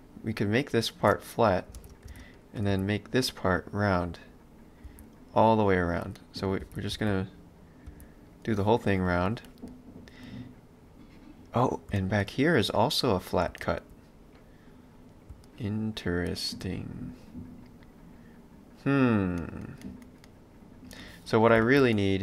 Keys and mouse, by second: 1.9 ctrl+space, 2.4 click, 2.8 b, 6.2 middle click, 6.6 ctrl+z, 6.9 b, 8.9 middle click, 21.6 ctrl+z, 22.0 middle click.